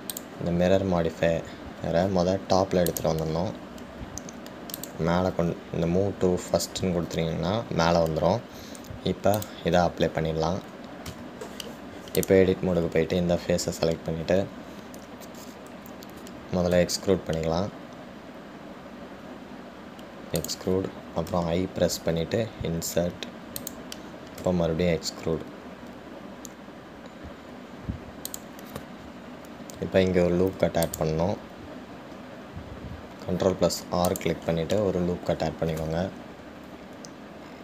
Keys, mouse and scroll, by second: 1.3-4.4 drag, 6.0-9.1 drag, 30.3-30.6 scroll up 2, 31.6 ctrl+r, 36.5 scroll up 1.